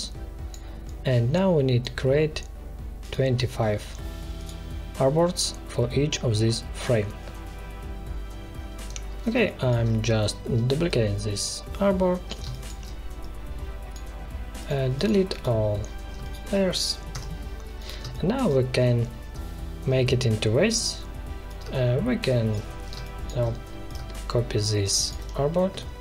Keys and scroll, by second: 9.3 space, 12.4 space, 17.0 Delete, 17.9 space, 22.9 space.